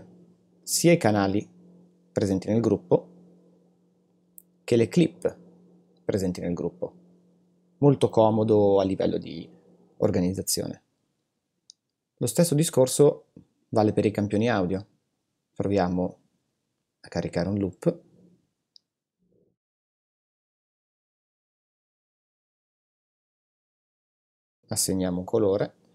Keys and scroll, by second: 20.0 super+l.